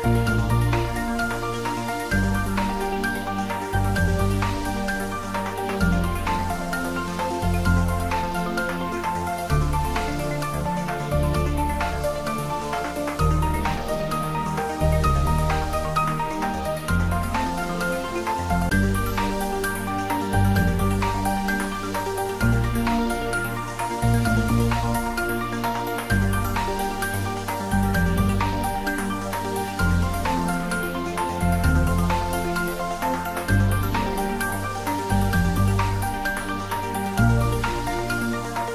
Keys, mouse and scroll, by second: 0.5-2.2 drag, 6.1 scroll down 1, 9.2 `, 9.8 3, 10.9-11.6 scroll up 1, 13.8-15.6 scroll up 1, 15.9-20.3 drag, 34.5 scroll down 1, 35.4-37.1 scroll up 1, 37.1-38.2 scroll down 1, 38.2 scroll up 1.